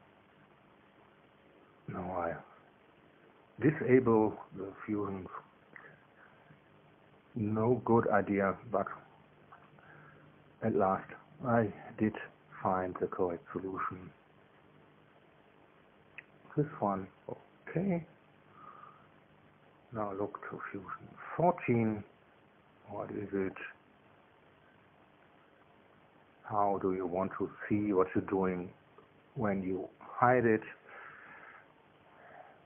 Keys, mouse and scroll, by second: 0.9 click, 1.2 space, 3.0 click, 3.4 space, 4.1 click, 4.5 space, 8.5 click, 12.0 space, 12.7 space, 14.7 click, 15.3 space, 21.4 click, 22.4 click, 31.7 click.